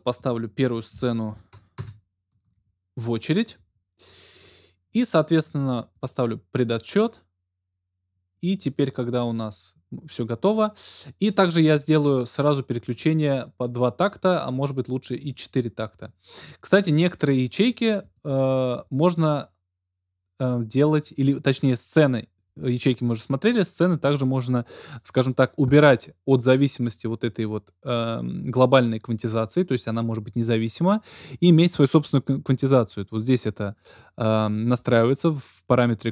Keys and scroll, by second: 1.7 alt+Return.